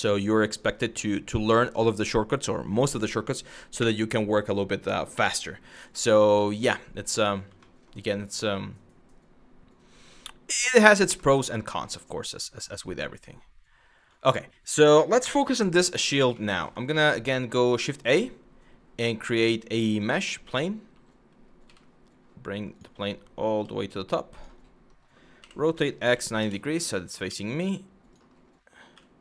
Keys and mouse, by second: 7.2 shift+middle drag, 10.9 shift+middle drag, 16.0 shift+middle drag, 17.4 shift+a, 21.3 g, 22.4 click, 23.1 g, 24.0 click, 25.0 r, 25.4 x, 25.7 KP_9, 25.9 KP_0, 26.1 KP_Enter, 26.9 s, 27.8 click.